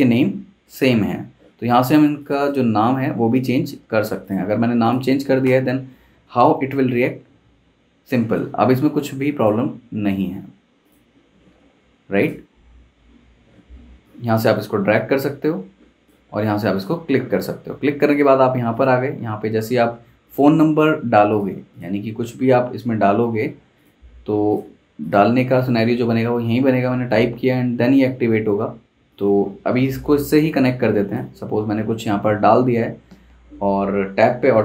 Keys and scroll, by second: 3.6 typing, 5.4 super+Return.